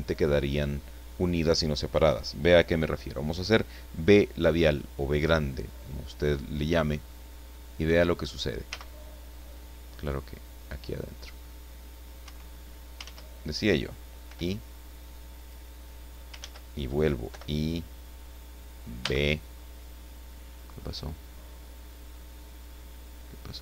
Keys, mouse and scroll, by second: 8.7 b, 12.2 Escape, 13.0 ctrl+z, 14.2 i, 15.3 click, 16.3 ctrl+z, 17.3 ctrl+i, 19.0 b.